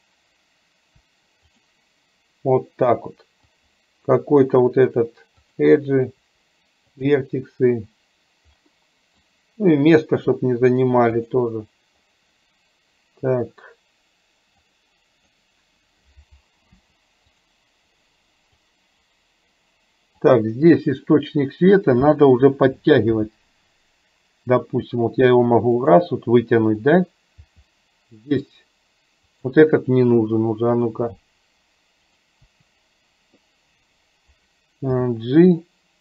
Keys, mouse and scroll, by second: 1.1 Delete, 3.7 click, 4.2 Delete, 6.3 Delete, 9.6 click, 10.8 Delete, 14.8 click, 16.8 Delete, 18.8 click, 20.3 click, 23.2 g, 27.4 g, 30.2 Delete, 32.6 Delete, 35.1 g.